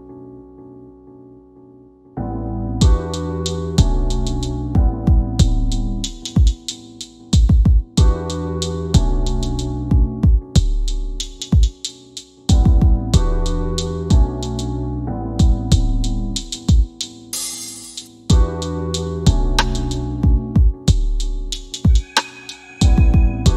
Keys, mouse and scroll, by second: 0.7 click, 4.9 c, 13.8 scroll down 1, 17.7 click, 19.5 click, 20.0 8, 21.5 click.